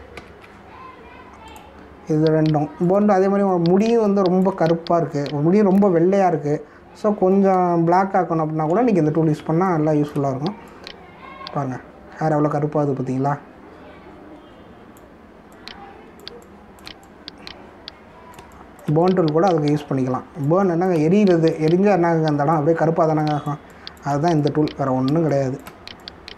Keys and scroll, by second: 3.9 space, 6.7 [, 7.3 ], 8.7 ctrl+-, 9.4 ctrl+=, 10.3 space, 17.2 space, 19.3 space, 21.3 space, 24.0 space.